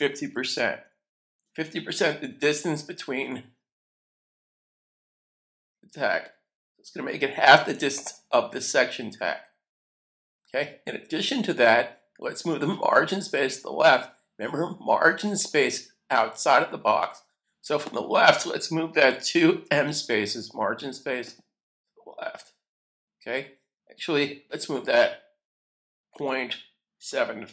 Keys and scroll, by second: 0.0-2.4 typing, 19.0-20.4 typing, 26.1-27.5 typing.